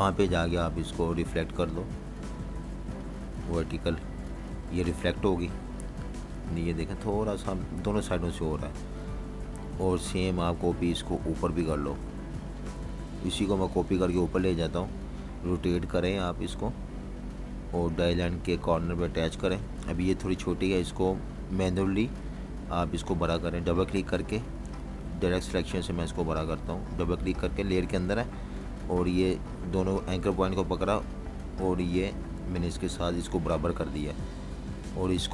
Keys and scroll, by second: 4.6-8.6 typing, 8.8 super+-, 9.0 super+-, 9.8-11.9 typing, 19.8 typing, 21.2 v, 22.3 v, 32.7 v, 33.7 super+-, 33.9 super+-, 34.7-35.3 typing.